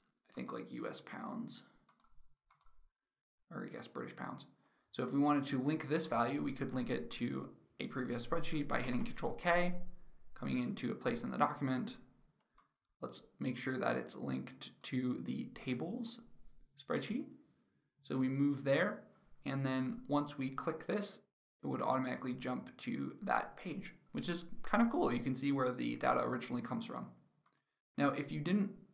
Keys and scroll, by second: 8.3 ctrl+k.